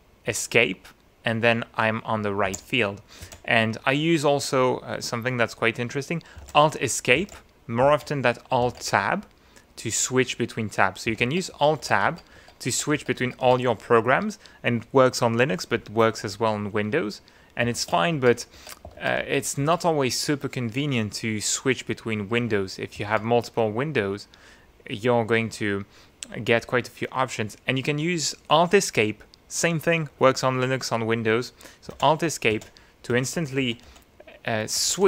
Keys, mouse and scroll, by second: 0.3 Escape, 2.7 alt+Escape, 3.5 alt+Escape, 6.6 Escape, 7.4 Escape, 7.9 alt+Tab, 8.7 alt+Tab, 11.2 Tab, 17.8 alt+shift+Tab, 23.0 alt+Tab, 32.1 Escape, 32.7 Escape, 33.6 Escape, 34.9 alt+shift+Escape.